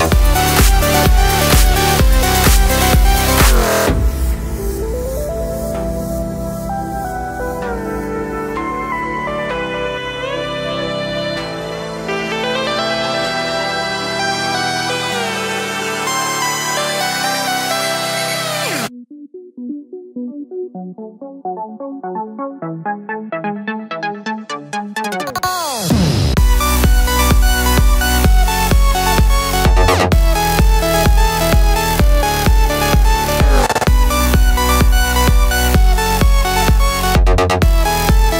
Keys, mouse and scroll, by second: 1.2 k, 13.5 middle click, 14.2 KP_5, 18.8 k, 25.3-30.7 middle drag, 25.8 ctrl+e, 26.1 Escape, 26.3 ctrl+r, 26.9 Escape, 29.5 Tab, 30.7 click, 31.3 ctrl+click, 31.7 middle click, 32.4 click, 34.9 click, 35.3 Tab, 35.7 click, 36.8-37.4 drag, 37.8 Tab.